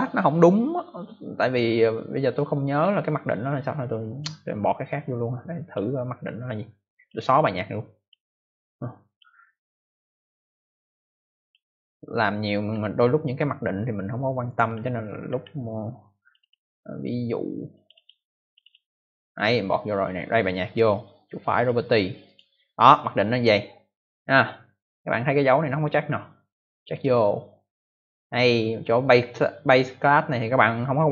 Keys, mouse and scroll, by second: 3.9 click, 5.5 click, 6.9 click, 7.9 click, 9.0 click, 11.3 click, 12.7 scroll up 2, 14.4 click, 15.4 scroll down 1, 16.1 click, 16.3 click, 16.4 double click, 17.7 double click, 17.9 double click, 18.0 double click, 18.4 double click, 18.6 double click, 20.3 click, 20.7 right click, 20.8 double right click, 21.5 click, 22.2 click, 26.8 click.